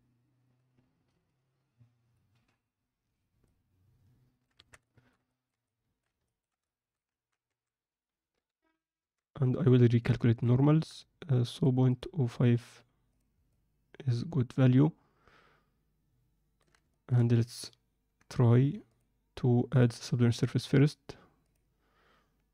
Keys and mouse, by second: 1.5-3.3 drag, 3.4-4.4 middle drag, 4.5 Tab, 4.8 shift+middle click, 5.3 ctrl+alt+middle click, 5.6 middle click, 6.2 ctrl+alt+middle click, 6.7 alt+shift+middle click, 7.4 a, 8.3 shift+n, 8.9 Tab, 9.5-9.9 middle drag, 10.2 ctrl+alt+middle drag, 10.5 middle click, 11.9 click, 13.5-16.5 alt+middle drag, 16.9 alt+shift+middle click, 18.8 click, 19.7-21.6 drag.